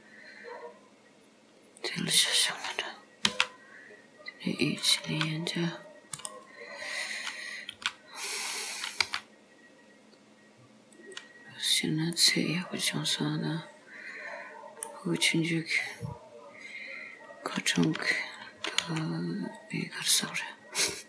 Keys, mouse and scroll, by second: 3.3 e, 5.2 r, 7.8 r, 9.1 g, 11.5-11.9 scroll down 3, 12.2 middle click, 15.5 scroll up 3, 16.1 scroll down 2, 17.9 r, 18.8 g, 20.2-20.7 scroll up 1, 20.7-21.0 scroll down 2.